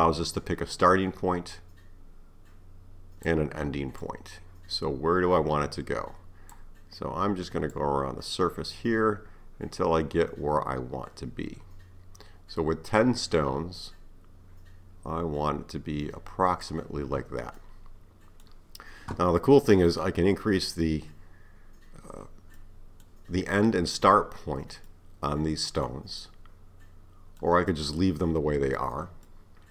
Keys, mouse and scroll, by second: 4.0-7.0 drag, 7.7-10.8 drag, 17.6-20.6 middle drag, 22.6-29.7 middle drag.